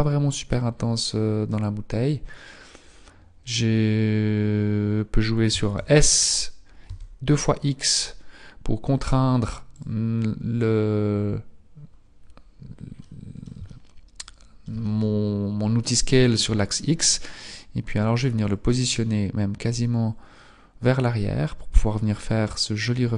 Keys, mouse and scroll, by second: 0.5 scroll up 2, 5.3 s, 12.8 middle click, 13.6 shift+middle click, 14.7 middle click, 17.3 click.